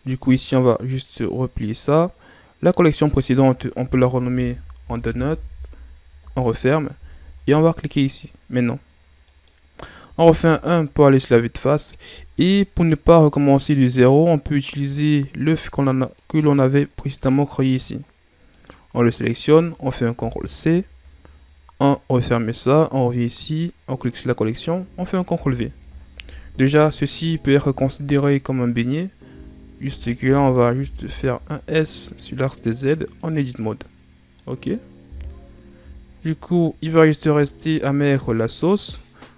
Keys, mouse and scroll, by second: 0.8 click, 2.8 click, 3.0-6.0 drag, 8.0 click, 8.9 scroll down 2, 9.2 middle click, 10.1 KP_1, 14.6 click, 16.0 click, 16.7 middle click, 17.4-18.4 scroll up 6, 18.4 right click, 20.1 ctrl+c, 22.0 click, 22.9 click, 23.9 click, 25.2 ctrl+v, 26.2 KP_1, 27.8 scroll down 2, 28.2 scroll up 2, 29.2 Tab, 29.7 a, 30.1 a, 30.6 s, 33.6-35.0 middle drag, 35.0 KP_1, 36.0-36.5 shift+scroll up 3, 36.5 middle click, 37.2-39.3 scroll up 4.